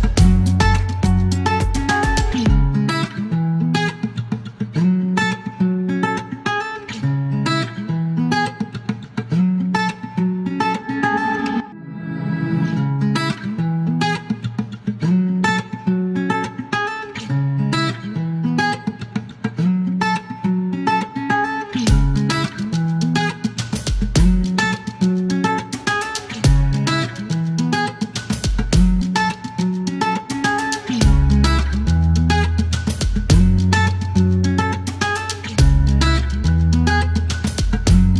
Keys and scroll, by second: 0.0-0.1 typing, 3.8 s, 6.3-7.2 typing, 9.7 space, 10.1 space, 10.9 F1, 12.4 ctrl+a, 12.5 ctrl+e, 15.9 space, 17.3 KP_0, 17.4 Return, 18.3 ctrl+a, 18.4 ctrl+d, 22.0 KP_1, 22.0 KP_3, 22.1 Return, 23.3 typing, 24.9 space, 26.4 F2, 27.1 typing, 31.4 space, 32.8 typing, 34.9-36.4 typing.